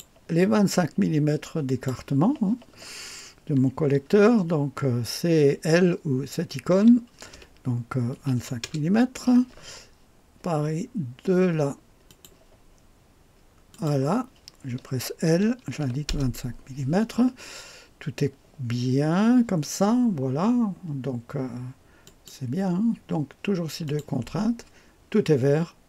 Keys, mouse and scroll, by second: 1.7 click, 8.1 KP_2, 8.4 KP_5, 8.6 Return, 12.1 click, 13.7 click, 15.6 KP_2, 15.8 KP_5, 16.1 Return, 22.1 click, 23.9 click.